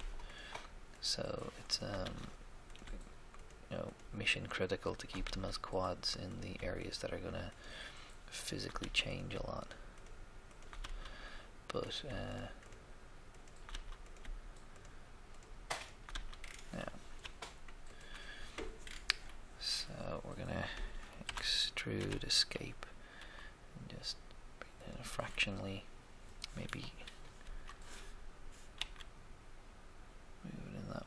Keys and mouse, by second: 2.0 f, 2.1 f, 5.2 f, 5.3 f, 8.7 f, 8.9 f, 10.7 f, 10.8 f, 13.7 f, 13.7 f, 16.1 f, 16.3 f, 17.9-19.3 drag, 19.5 click, 21.2 e, 21.3 e, 21.9 Escape, 23.2 s, 27.4 g, 28.8 x.